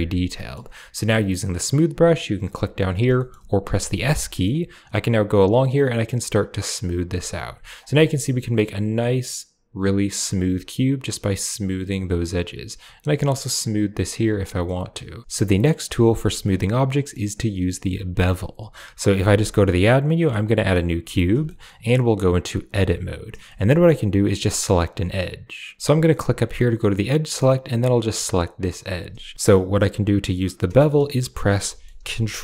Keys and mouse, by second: 0.2 middle click, 1.6 click, 3.0 middle click, 3.5 s, 4.2 middle click, 4.9 click, 8.0 click, 14.5 middle click, 16.8 middle click, 19.2 shift+a, 21.3 click, 22.5 Tab, 23.3 shift+click, 25.8 a, 26.2 click, 27.4 click, 28.3 click, 29.7 middle click, 30.6 middle click, 31.2 middle click, 31.6 shift+middle click.